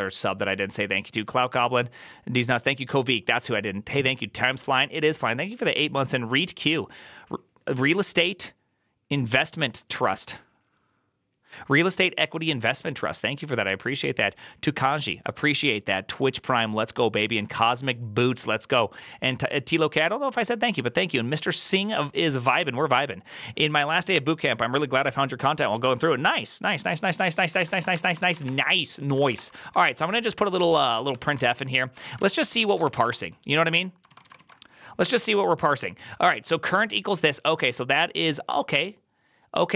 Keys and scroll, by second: 25.6 alt+{, 27.3-34.6 typing, 28.3 Return, 28.9 ctrl+c, 29.5 Return, 29.5 ctrl+u, 29.6 ctrl+u, 30.9 ctrl+c.